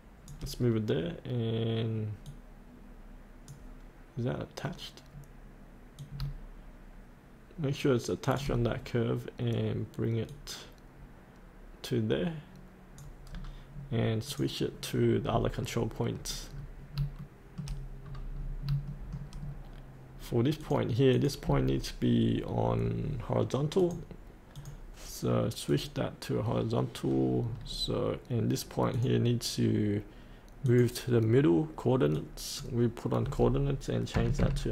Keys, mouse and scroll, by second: 2.3-8.4 drag, 10.3-13.3 drag, 13.3-14.3 scroll up 1, 14.3 click, 15.2-16.4 scroll up 1, 17.2 shift+middle click, 18.0-18.9 scroll down 1, 18.9 middle click, 19.4-20.6 scroll down 1, 20.7 click, 22.4-22.8 scroll up 1, 22.8-23.4 scroll down 1, 23.7-26.8 drag, 27.5-30.4 scroll down 1, 30.6 click, 34.1 KP_8.